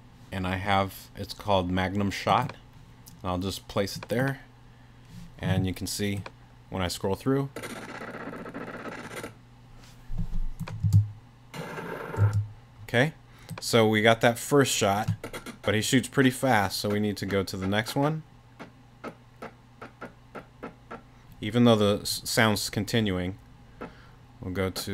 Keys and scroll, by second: 10.8 space, 12.2 space.